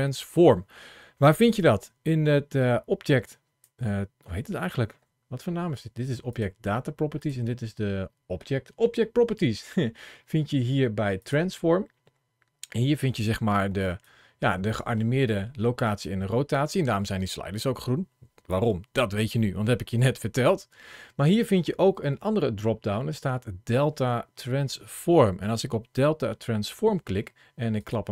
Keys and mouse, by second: 1.1 ctrl+shift+a, 6.1 click, 7.0 click, 11.0 click, 13.5 ctrl+shift+a.